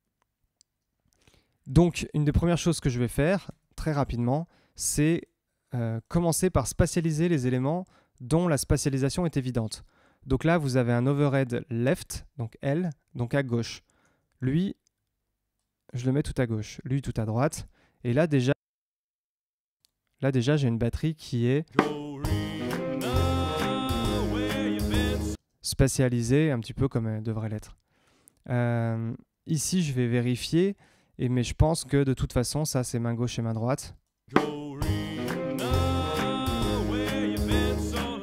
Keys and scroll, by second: 3.4 Tab, 9.8 Tab, 13.9 Tab, 15.1 Tab, 21.6 space, 25.3 space, 34.2 space.